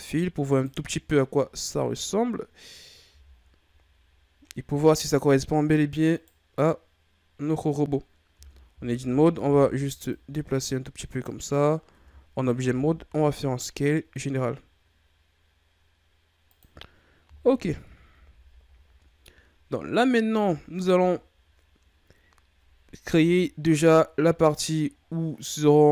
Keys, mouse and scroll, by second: 0.0 scroll up 1, 0.5 right click, 3.1 a, 3.4-4.4 scroll down 3, 4.4-5.5 scroll up 4, 6.2 right click, 8.3 Tab, 8.7 a, 8.9 a, 9.4 a, 10.1-11.9 drag, 11.9 Tab, 12.7 s, 17.6 KP_1, 18.2 a, 18.8 scroll down 2, 20.6-21.4 shift+scroll down 3, 21.4-23.1 scroll up 1, 23.1 KP_3.